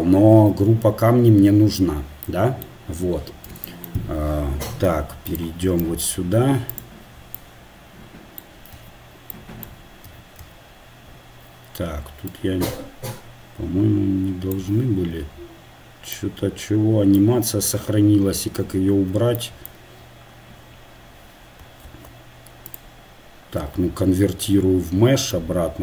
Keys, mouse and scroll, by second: 0.4 ctrl+g, 5.7-8.7 drag, 6.7-8.7 middle drag, 6.7-8.7 right drag, 8.7 Tab, 10.1 a, 10.4 a, 12.3-14.2 drag, 14.9 Tab, 18.6 ctrl+z, 25.3-25.8 drag.